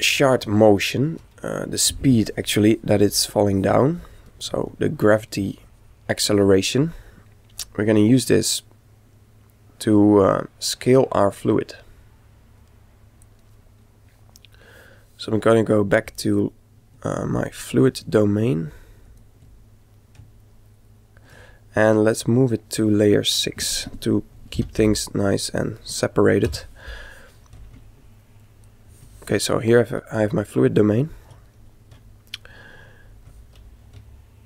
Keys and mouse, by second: 0.9 KP_1, 4.8-6.6 middle drag, 7.6 click, 17.4-20.7 drag, 20.7-22.1 middle drag, 22.1-24.3 right drag, 24.3 m, 28.5 click, 30.4-33.9 middle drag.